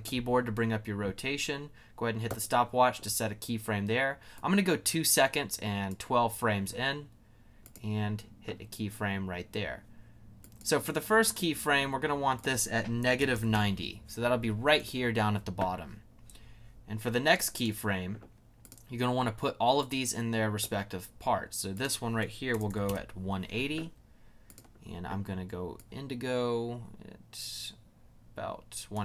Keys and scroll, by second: 12.7-13.8 typing, 22.0-23.2 typing.